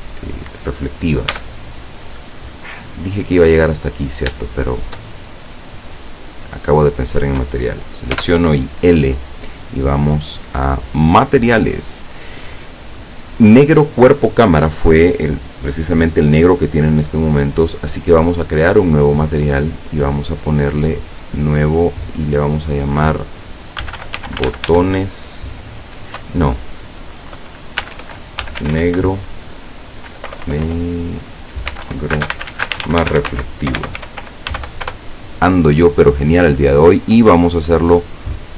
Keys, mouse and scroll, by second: 0.3 right click, 1.4 Tab, 1.8-2.3 scroll up 2, 2.3-3.3 middle drag, 3.6-4.1 scroll up 1, 4.5-5.8 shift+middle drag, 6.8 right click, 8.2 l, 9.5 middle click, 10.8 click, 19.4 click, 21.3 click, 22.7 click, 23.9-24.7 typing, 26.3 BackSpace, 27.9-28.8 typing, 30.4 BackSpace, 31.7-34.7 typing, 35.0 Return, 37.0 click, 38.2-38.5 drag.